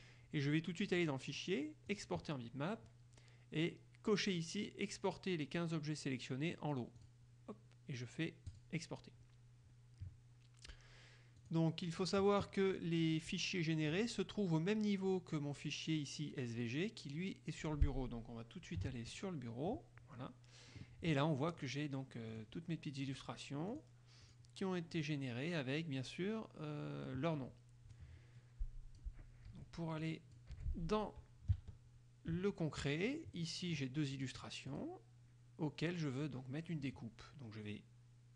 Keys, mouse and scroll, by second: 1.2 click, 2.0 click, 7.2 click, 8.6 click, 11.6 click, 19.1 alt+Tab, 21.6 click, 22.4 click, 23.2 click, 23.9 click, 24.4 click, 25.2 click, 28.1-29.4 drag, 29.7 Delete, 30.2 click, 30.7 Delete, 31.8 alt+Tab, 33.6 click, 34.1 scroll up 1, 34.3 click, 34.6 scroll up 1, 34.9 click, 35.2-38.3 scroll up 1.